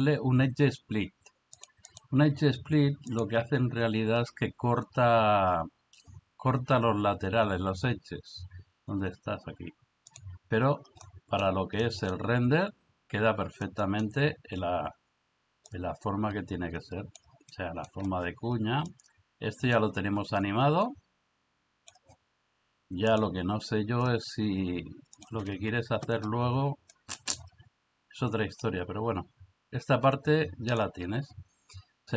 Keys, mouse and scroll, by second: 0.0-1.6 drag, 1.9 click, 3.3-10.2 drag, 11.0 middle click, 11.8-12.2 middle drag, 13.7-14.1 middle drag, 15.7-17.2 drag, 17.5-17.8 middle drag, 18.9-21.9 drag, 23.1 click, 25.1 click, 25.6 Escape, 26.9-27.3 middle drag, 28.7-30.8 drag.